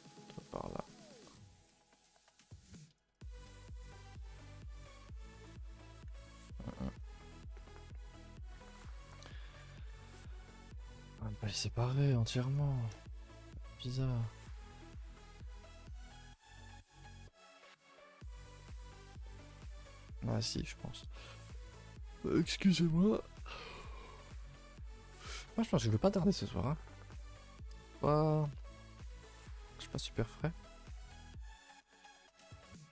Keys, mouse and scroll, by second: 0.5 alt+shift+click, 0.9-3.2 middle drag, 3.2 right drag, 3.4 a, 4.8 u, 6.2 ctrl+z, 6.8 scroll down 2, 6.9 a, 7.1 a, 7.3 middle click, 7.5-7.9 scroll down 2, 7.9 middle click, 8.6 ctrl+z, 8.8 ctrl+z, 9.8 a, 9.9 a, 10.1-12.5 middle drag, 12.5-13.0 scroll up 2, 13.0-14.7 shift+middle drag, 14.7-15.0 scroll down 2, 15.2 middle click, 16.0-16.4 scroll down 2, 16.4 Tab, 16.6-18.2 middle drag, 18.2 click, 18.5 middle click, 18.8 Tab, 18.9-19.2 scroll up 2, 19.2 middle click, 19.4 a, 19.6 a, 19.8 middle click, 20.8 click, 21.2 middle click, 21.4-21.8 scroll down 2, 21.8-27.4 middle drag, 27.4 scroll up 1, 27.7 shift+middle click, 28.4 a, 28.6 a, 28.7-32.9 middle drag.